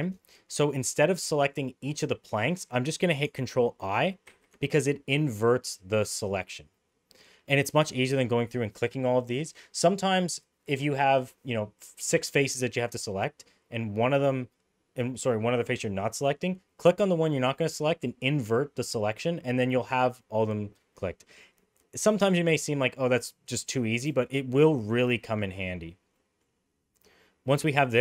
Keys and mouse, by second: 4.3 ctrl+i, 6.7 middle click, 20.9 middle click, 24.5 middle click, 26.1 middle click.